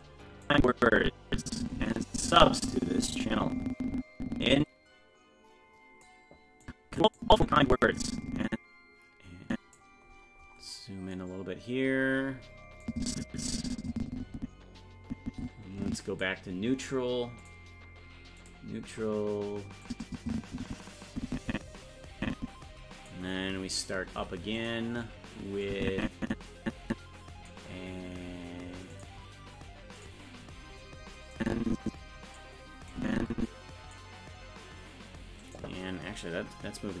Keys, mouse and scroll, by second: 0.5-6.0 drag, 6.6 click, 7.2-9.8 drag, 10.1-10.8 scroll up 10, 11.5-12.2 scroll down 1, 12.2-12.9 scroll down 1, 12.9-16.2 drag, 17.4 click, 18.4 click, 19.9-23.1 drag, 24.1 i, 25.7-27.5 drag, 28.9 click, 30.0 click, 31.4-32.4 drag, 32.9-33.9 drag, 35.4-37.0 right drag.